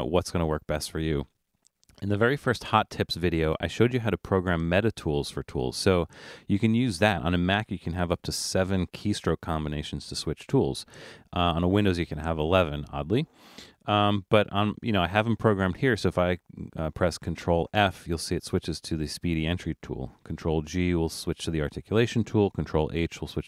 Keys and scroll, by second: 17.2 ctrl+f, 20.2 ctrl+g, 22.4 ctrl+h.